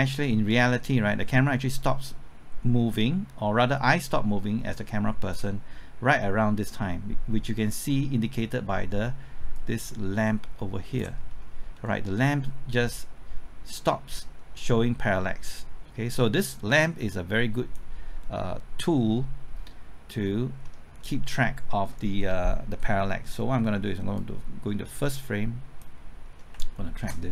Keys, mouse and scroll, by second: 11.2-11.7 scroll up 1, 11.7-13.0 scroll down 1, 13.0-18.6 drag, 20.2-20.6 scroll up 1, 20.6 middle click, 21.0-23.6 scroll up 1, 24.2-26.2 drag, 26.2 scroll up 1.